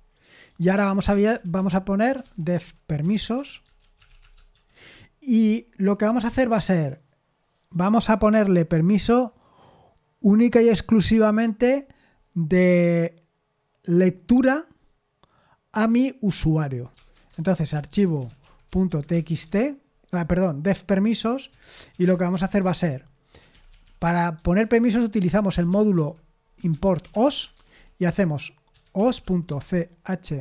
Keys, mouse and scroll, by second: 0.0-5.0 typing, 17.2-30.4 typing, 22.6 Return.